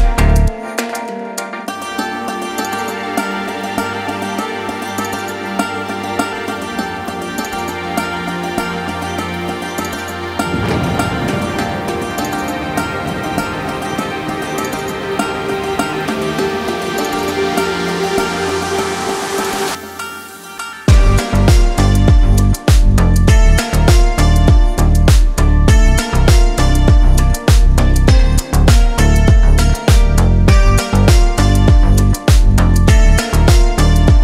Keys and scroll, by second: 0.0 g, 4.7 g, 8.8 g, 11.8 g, 16.9 g, 21.7 g, 28.0 Tab.